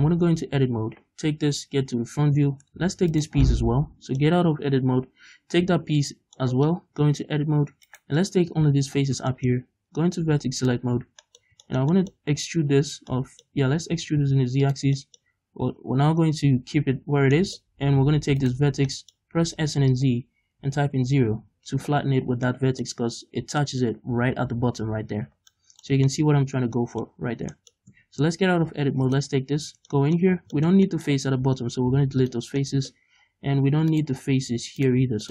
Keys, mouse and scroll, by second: 0.3 scroll down 2, 0.5 a, 1.5 KP_1, 2.4 Tab, 3.1 shift+right click, 3.5-4.5 middle drag, 4.8-6.4 scroll up 1, 6.4 middle click, 7.0 Tab, 7.4-7.9 scroll up 1, 7.9 right click, 9.4 shift+middle click, 10.6 click, 11.8-19.4 middle drag, 14.0 e, 14.8 click, 18.5 shift+right click, 19.4 s, 21.4 Return, 22.5-28.0 middle drag, 25.4 scroll down 2, 26.0 Tab, 27.2 scroll up 2, 27.4 Tab, 28.0 Tab, 29.1 right click, 29.7 Tab, 30.0 middle click, 30.4 scroll down 2, 31.5 x, 32.7 middle click, 34.0 click, 34.9 right click, 35.0 x.